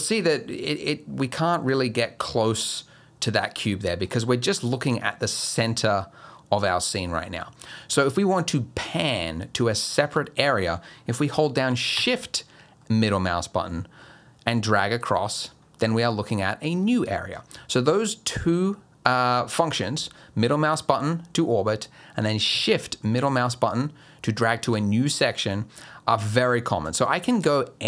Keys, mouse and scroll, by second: 5.0 middle click, 6.9 middle click, 12.8 shift+middle click, 20.2 middle click, 23.0 shift+middle click, 25.4 middle click, 27.0 shift+middle click.